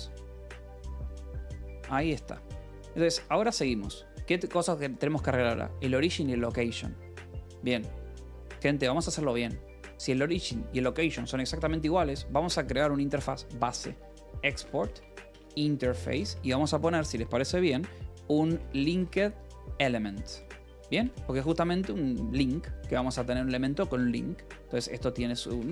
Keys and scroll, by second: 0.4 k, 1.4-3.6 typing, 4.0 Escape, 7.0 a, 13.8-16.6 typing, 18.4-20.9 typing, 21.2 Return, 24.3-25.7 typing.